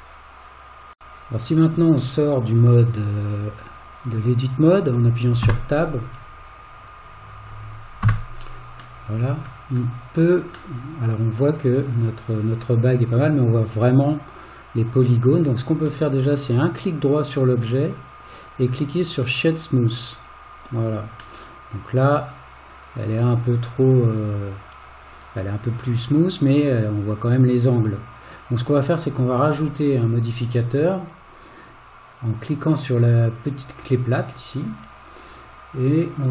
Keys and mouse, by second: 8.1 Tab, 9.0-9.5 middle drag, 10.8-15.9 middle drag, 17.6 right click, 21.4-29.5 middle drag, 36.2-36.3 drag.